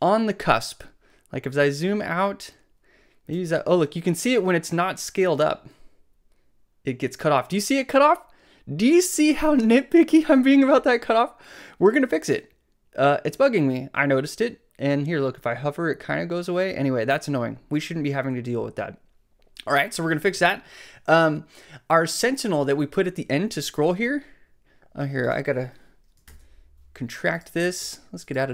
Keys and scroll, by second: 26.3 alt+super+i.